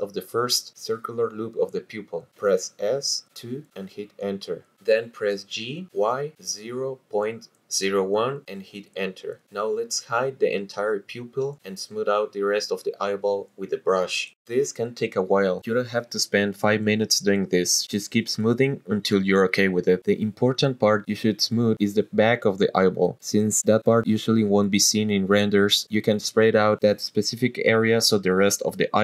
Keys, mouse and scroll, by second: 1.5 click, 2.8 s, 3.2 KP_2, 4.0 Return, 5.6-8.0 typing, 8.8 Return, 9.8 shift+click, 11.0 h, 12.5-13.2 drag, 13.3-14.0 scroll down 3, 13.6 middle click, 14.4 scroll down 1, 16.1 shift+click, 16.9 middle click, 17.2 scroll down 2, 17.3 shift+click, 20.2 middle click, 20.4 shift+click, 21.0 middle click, 21.2 shift+click, 22.0 scroll up 2, 22.2 shift+click, 22.7 shift+click, 24.2 middle click, 24.5 shift+click, 25.4 scroll down 1, 25.6 middle click, 25.7 shift+click, 26.9 middle click, 27.1 shift+click, 27.7 middle click, 28.0 middle click, 28.6 shift+click.